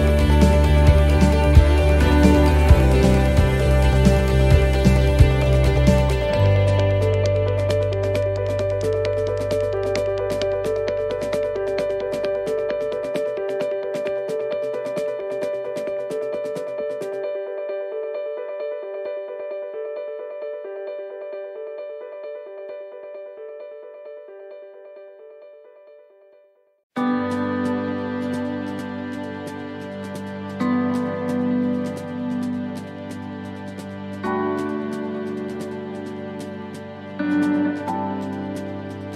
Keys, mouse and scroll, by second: 1.1 right click, 2.4 l, 3.3 click, 5.0 middle click, 5.8 right click, 6.7 l, 7.6 click, 9.3 scroll down 1, 9.9 right click, 10.3 l, 11.2 click, 12.9 shift+d, 14.0 click, 16.5 middle click, 17.0 shift+middle click, 17.6 shift+d, 18.6 click, 20.9 shift+d, 22.0 click, 24.9 shift+middle click, 25.5 shift+d, 26.8 click, 29.2-29.6 scroll down 3, 29.6 middle click, 29.9-30.3 scroll down 2, 30.4 shift+middle click, 30.9 scroll up 3.